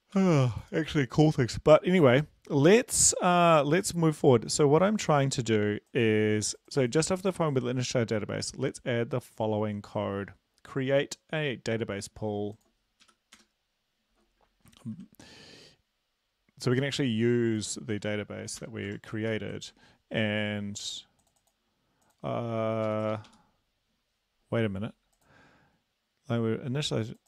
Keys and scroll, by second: 0.2 ctrl+l, 13.0 Up, 13.4 Return, 14.8 ctrl+`, 18.6 Return, 18.9 shift+Tab, 19.3 ctrl+v, 22.9 Up.